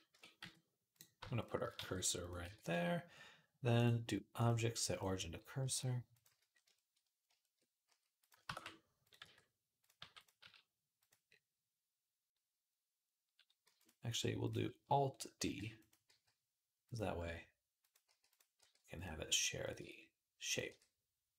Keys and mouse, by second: 0.2 z, 1.6 shift+s, 2.2 Tab, 5.4 s, 6.1 z, 6.3 shift+right click, 7.7-10.2 typing, 9.9-15.9 drag, 13.4 x, 15.2 alt+d, 15.9 g, 17.0 s, 17.9 g, 18.4 r, 19.6 Tab, 20.0 middle click, 20.3 click, 20.4 middle click, 20.5 g.